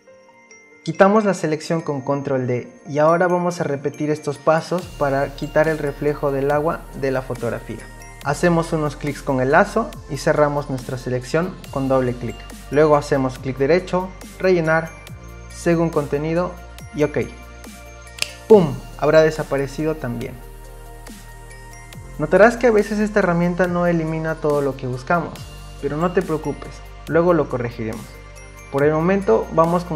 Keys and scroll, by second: 2.8 ctrl+d, 27.5 ctrl+d.